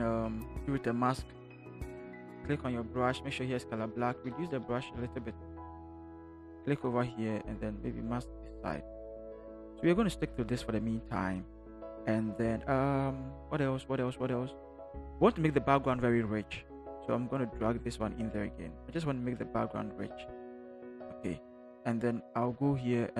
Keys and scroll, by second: 2.9 b, 5.1 [, 20.7 Return.